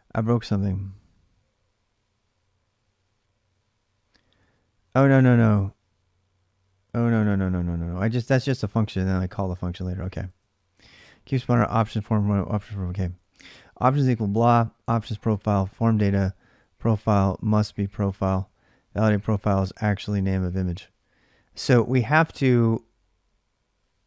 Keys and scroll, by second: 0.0-5.6 typing, 7.4-13.1 typing, 14.6-18.1 typing.